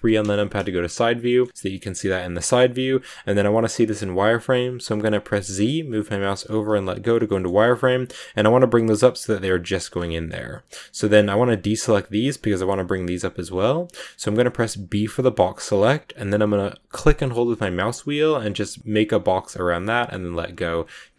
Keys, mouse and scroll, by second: 0.6-3.8 shift+middle drag, 7.2 shift+middle click, 7.4 scroll up 5, 9.8 scroll down 3, 10.0-13.0 shift+middle drag, 21.0-21.1 scroll up 1.